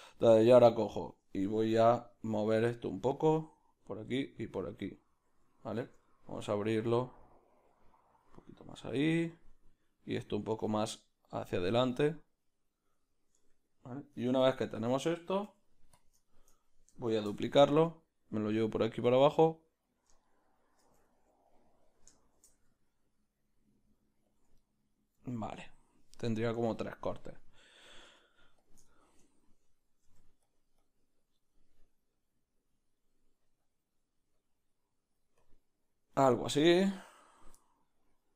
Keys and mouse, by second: 1.1 Tab, 1.1 b, 2.5 click, 3.1-16.2 drag, 6.8 f, 9.5 q, 13.5 Tab, 14.4 1, 16.0 q, 16.2-19.9 shift+middle drag, 17.2 shift+d, 19.9 shift+d, 20.2-22.3 shift+middle drag, 22.3 shift+d, 24.5 ctrl+middle click, 28.7 Tab, 28.7 b, 28.9 shift+middle click, 30.0-31.5 middle drag, 30.8 click, 30.8 f, 31.5-38.3 drag, 37.5-38.3 middle drag.